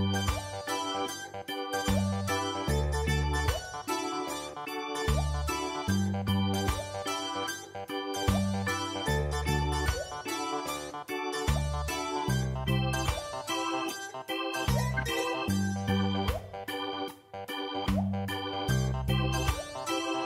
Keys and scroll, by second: 0.6 ctrl+v, 1.1 f, 3.6 ctrl+space, 4.6 ctrl+space, 5.1 ctrl+space, 8.7 typing, 14.4-15.3 typing, 16.2 Return, 19.6 Return.